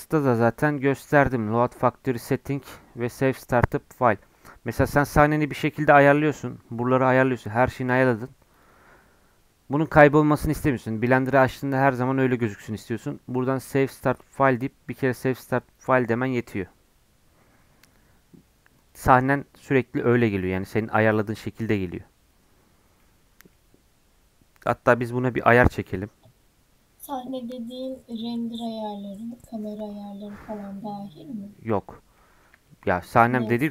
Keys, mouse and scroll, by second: 4.5 scroll down 1, 4.6 middle click, 5.5-6.6 scroll up 1, 8.5-21.7 drag, 22.8 scroll down 2, 23.0-25.1 middle drag, 25.1 KP_1, 30.3-31.7 scroll up 1, 31.7 scroll down 2, 32.1-33.7 middle drag.